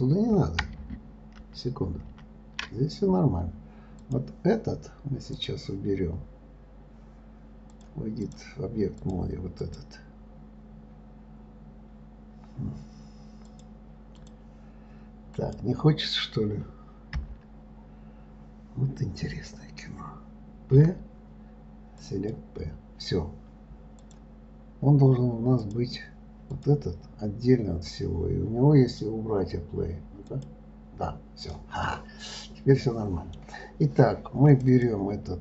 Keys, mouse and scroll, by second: 4.4 click, 5.7-9.5 drag, 10.0 click, 13.9-15.9 drag, 17.6 l, 24.3-27.0 drag, 30.7 click, 31.8 click, 32.2-34.8 middle drag, 34.8 click, 35.1 click.